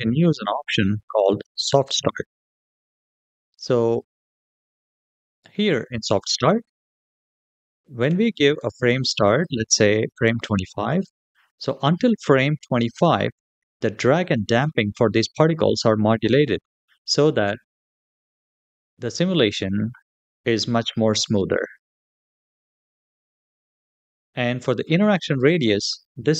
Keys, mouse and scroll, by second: 1.2-1.6 scroll down 3, 3.0 click, 9.1-10.8 drag.